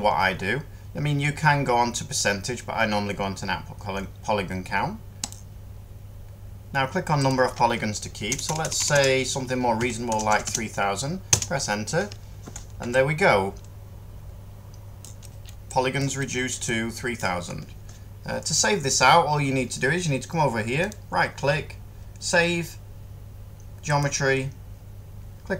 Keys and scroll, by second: 8.2-10.0 typing, 11.2 Return.